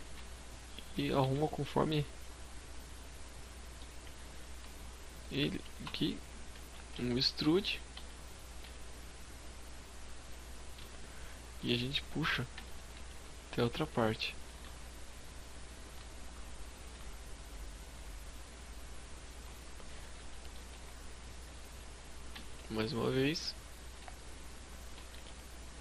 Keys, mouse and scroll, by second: 0.1 shift+click, 0.3 z, 0.5 middle click, 3.0 s, 4.2 shift+click, 4.8 KP_3, 5.5 z, 5.9-6.4 scroll down 2, 6.4 e, 6.6 right click, 6.8 s, 9.2 click, 9.4-10.8 scroll down 4, 9.8 shift+middle click, 11.4 e, 11.7 right click, 12.2 click, 13.4 g, 18.5 shift+click, 19.1 scroll down 3, 19.3 shift+middle click, 19.8-20.3 scroll up 4, 21.3 e, 21.5 right click, 21.7 g, 23.9 shift+click, 24.1 s, 25.1 click, 25.3 g.